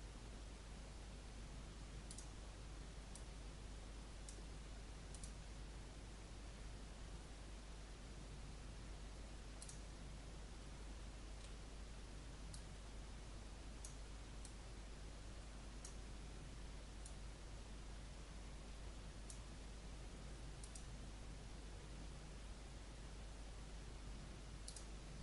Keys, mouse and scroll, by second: 10.8-11.3 scroll down 1, 12.5-19.4 drag.